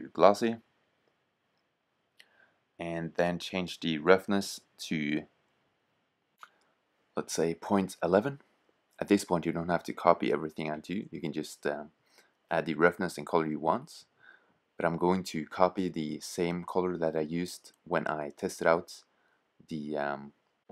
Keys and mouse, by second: 3.0-4.7 drag, 4.7 BackSpace, 8.2-8.7 drag, 12.1-14.1 drag, 19.5 click.